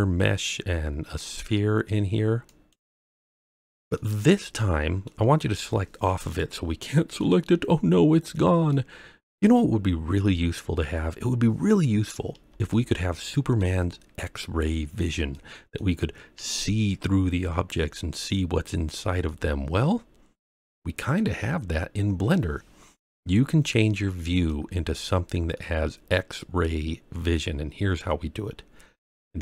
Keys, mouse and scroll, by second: 3.9-5.0 middle drag, 6.2 click, 6.8-7.2 middle drag, 8.7-9.4 middle drag, 12.7-13.6 shift+middle drag, 13.9-14.5 scroll up 2, 14.9-15.3 scroll down 2, 15.3 middle click, 18.2 scroll up 3, 18.8 scroll up 1, 18.8 scroll down 2, 19.0 scroll up 1, 19.2-21.1 middle drag, 23.2-23.6 scroll down 1, 23.6-24.4 middle drag, 24.6-25.5 scroll up 4, 25.5-27.3 middle drag.